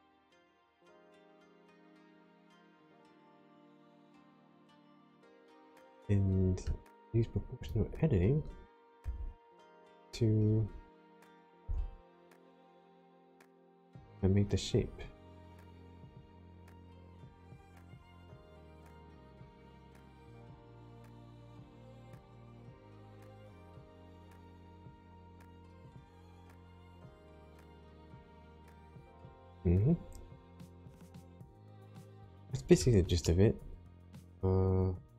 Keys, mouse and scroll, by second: 2.8 right click, 3.6 click, 4.5 middle click, 7.5 click, 9.0 1, 9.9 click, 11.6 g, 12.6-13.3 scroll up 9, 13.4-15.6 scroll down 4, 17.9 click, 18.4 click, 18.7 g, 21.1 click, 21.7 click, 22.1 g, 23.0 click, 24.0 click, 24.4 g, 24.8 click, 26.1 middle click, 30.9-31.6 scroll down 4, 31.8 shift+middle click, 33.1 middle click.